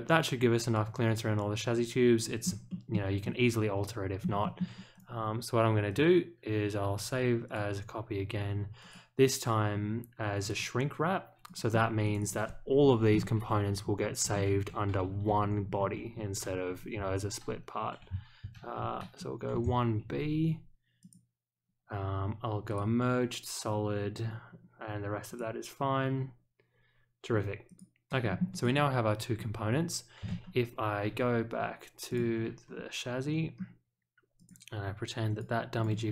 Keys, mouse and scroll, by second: 2.6 shift+middle click, 3.2-4.2 middle drag, 4.4 shift+middle click, 4.9 click, 5.8 click, 7.4 click, 8.8 click, 10.4 click, 11.4 click, 12.0 click, 12.2 click, 21.0 click, 22.6 click, 25.2 click, 27.6 click, 28.2 middle click, 28.6 click, 29.3-29.7 scroll up 1, 32.0 click, 32.7 scroll up 1, 34.3 click, 35.2 click, 35.7 click.